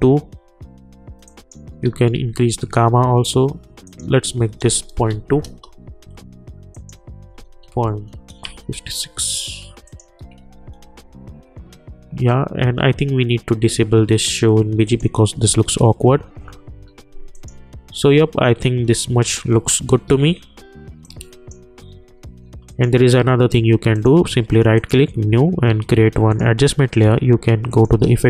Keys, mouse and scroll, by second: 1.2 click, 2.1 Return, 3.8 click, 5.4 Return, 6.7 click, 8.5 Return, 9.8 click, 11.0 Return, 14.8 click, 17.3 click, 20.1 `, 21.0-22.6 drag, 23.9 right click, 24.7 click, 28.0 ctrl+a.